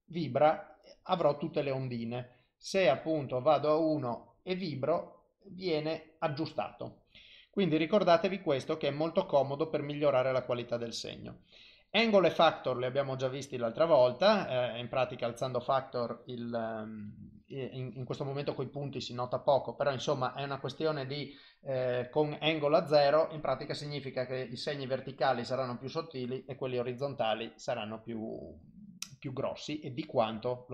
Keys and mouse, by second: 1.8 click, 2.9 click, 9.4 click, 14.7 click, 15.9 click, 19.0 click, 20.3 click, 24.2 click, 29.9 click.